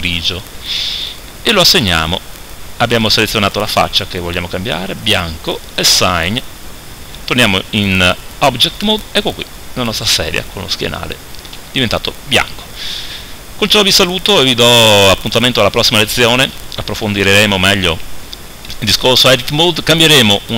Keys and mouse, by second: 3.6-4.9 right drag, 7.4 Tab, 10.8-20.5 middle drag.